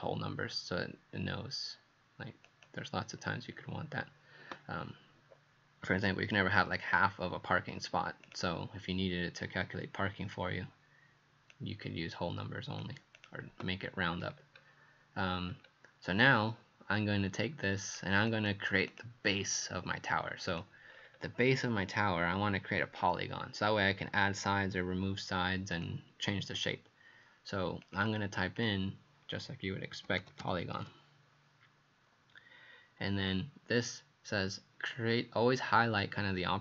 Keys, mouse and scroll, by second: 14.1-15.4 scroll down 4, 15.4 scroll up 2, 16.2 click, 16.2-17.6 scroll up 1, 18.9 click, 20.5 click, 20.9-25.7 scroll down 5, 28.6 click, 29.7-31.3 typing.